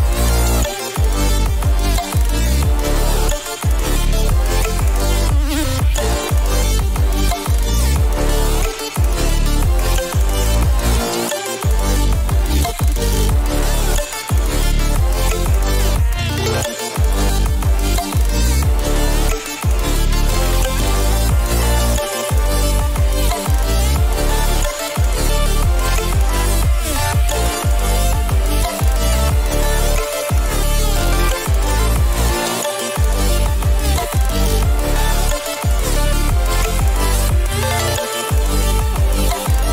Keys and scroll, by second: 2.0 Return, 12.0 ctrl+o, 34.9 ctrl+alt+shift+e, 38.4 ctrl+shift+a.